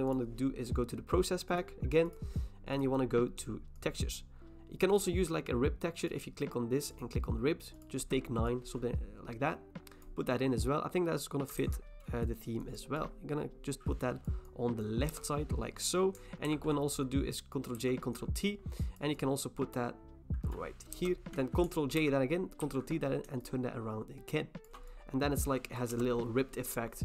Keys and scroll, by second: 11.6 ctrl+t, 15.1 Return, 16.5 ctrl+j, 17.8 ctrl+t, 20.9 Return, 22.0 ctrl+j, 22.6 ctrl+t, 25.9 Return.